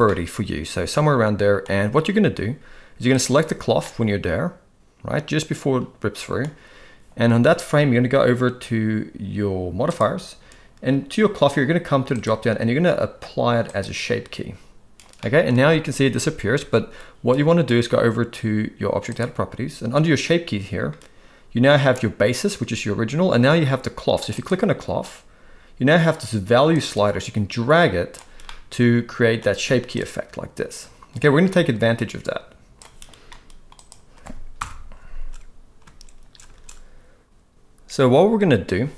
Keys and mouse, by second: 0.1-1.6 middle drag, 3.2-3.7 drag, 3.8-6.4 middle drag, 9.8 click, 12.3-13.8 drag, 15.2 middle click, 24.3 click, 26.7-28.2 drag, 28.4-29.3 middle drag, 29.9-32.7 drag.